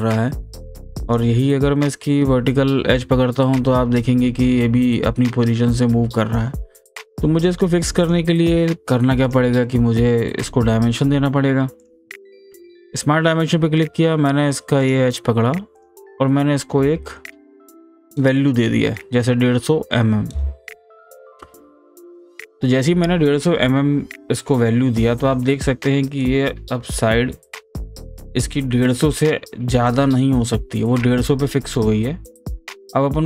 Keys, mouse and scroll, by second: 11.8 click, 14.8 click, 15.8 click, 26.2-29.9 drag, 29.9-33.2 drag.